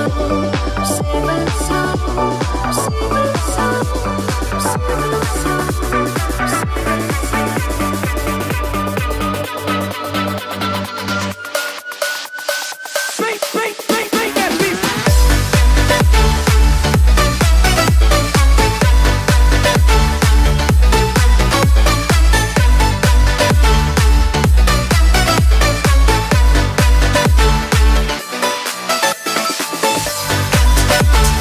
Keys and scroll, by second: 9.2 ctrl+0.